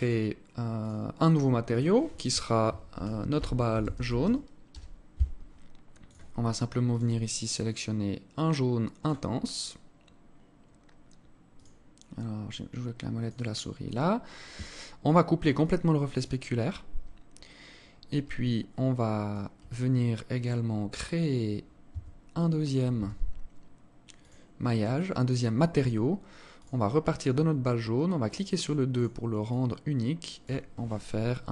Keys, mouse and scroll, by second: 0.4 click, 1.3 click, 5.6 click, 6.5 click, 11.1 click, 13.6-14.0 scroll down 3, 15.2 click, 16.4-16.8 scroll down 1, 16.8-17.2 scroll up 4, 18.0 alt+click, 20.5-21.5 scroll up 6, 21.5 Tab, 21.5 scroll up 1, 22.5 a, 23.8 click, 26.1 click, 27.9 click, 28.5 click.